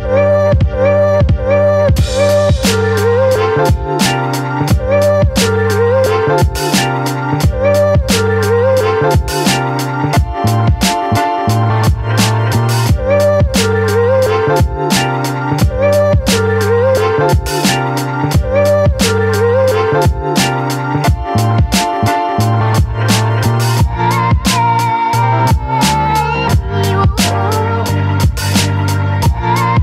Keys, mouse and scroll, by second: 0.2 ctrl+click, 1.3 ctrl+e, 1.8 space, 1.9 click, 2.3 space, 4.6-10.6 drag, 10.6 space, 10.9 click, 10.9 click, 11.1 space, 11.9 ctrl+t, 13.1-15.7 drag, 15.7-19.0 alt+drag, 19.5 space, 19.8-21.2 alt+drag, 21.2 ctrl+click, 23.9-24.3 scroll up 1, 24.3 space, 24.6 click, 24.7 space, 25.1-26.8 ctrl+drag, 26.8 t, 27.4 click.